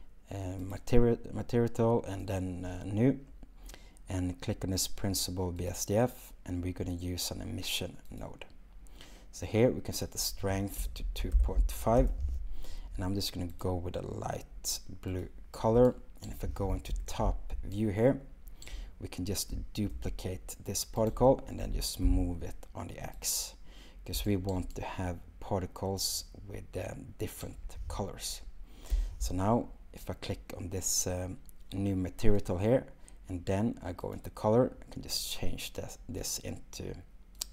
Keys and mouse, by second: 2.2 click, 5.6-8.3 drag, 10.1-12.0 drag, 13.5 click, 21.6 g, 22.0 x, 24.6 x, 32.2 click, 34.0 click.